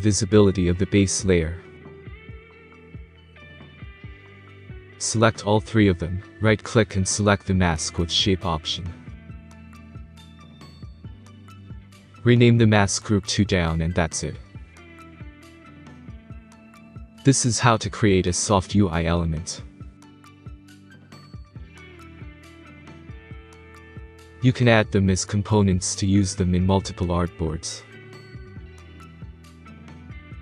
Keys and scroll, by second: 14.3-15.4 typing, 15.8 Return, 23.3 space.